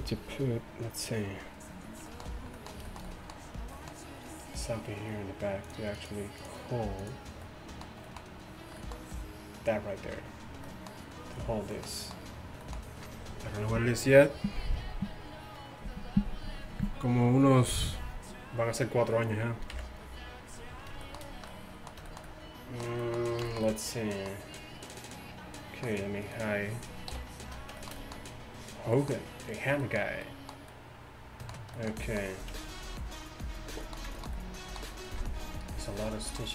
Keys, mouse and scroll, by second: 5.7-8.8 drag, 19.8 KP_1, 27.2 h, 29.4-30.9 middle drag.